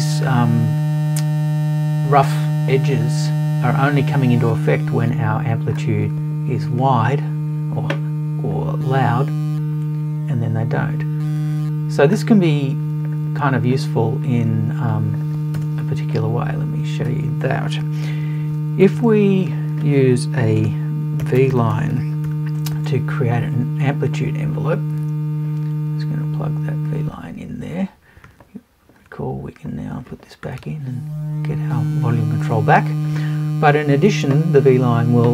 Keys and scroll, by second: 15.6 BackSpace, 21.2 BackSpace.